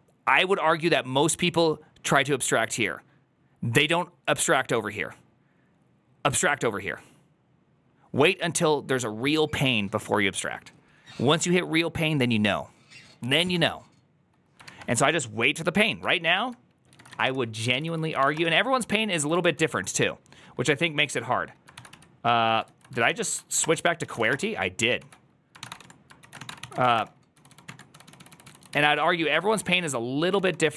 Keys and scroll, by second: 28.8-30.7 typing.